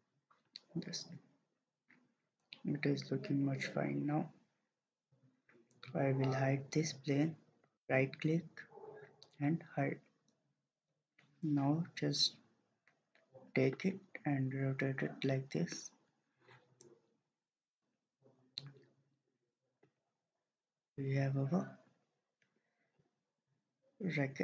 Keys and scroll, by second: 0.4-1.1 typing.